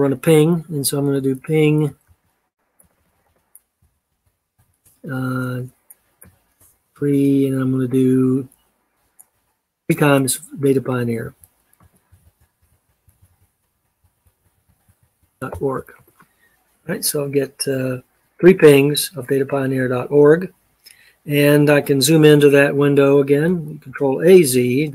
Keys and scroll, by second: 0.7-6.9 typing, 11.0-16.0 typing, 23.7 ctrl+a, 24.8 z.